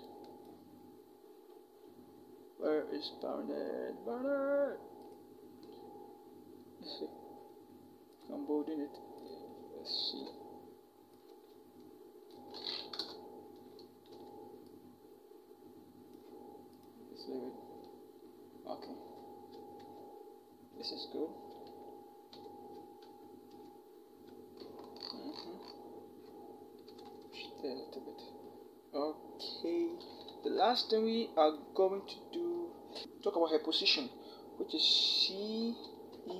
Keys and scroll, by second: 9.8 ctrl+t, 12.8 alt+shift+Return, 13.9 v, 19.5 ctrl+=, 22.1 ctrl+0, 22.8 ctrl+0, 23.3 ctrl+=, 26.7 Left, 26.9 Left, 27.1 Left, 30.3 t, 33.0 Caps_Lock, 35.4 c, 35.9 e.